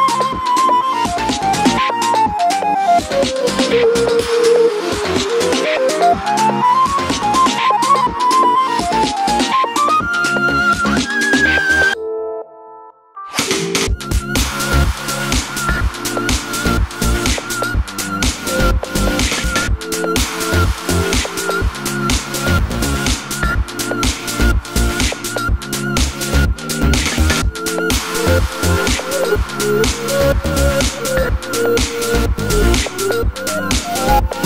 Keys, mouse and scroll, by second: 1.1 r, 1.8 click, 2.6 r, 3.1 click, 4.0 r, 4.6 click, 5.1 r, 5.6 middle click, 6.4 click, 6.7 middle click, 7.1 click, 7.4 r, 7.9 click, 8.0-9.1 middle drag, 9.1 click, 10.6-11.5 middle drag, 11.5 click, 15.9-19.6 middle drag, 16.5 g, 17.7 g, 19.6 click, 20.4-23.1 middle drag, 21.4 g, 22.7 g, 23.1 click, 23.1 middle click, 23.5 g, 24.0 click, 24.1-25.7 middle drag, 24.9 g, 25.7 click, 25.8-26.4 middle drag, 26.4 click, 26.6 middle click, 27.3 click, 27.7 r, 29.1-30.6 middle drag, 30.0 r, 30.6 click, 30.7-31.7 middle drag, 31.7 click, 32.4-32.8 scroll down 1, 32.8-33.3 middle drag, 33.3 click.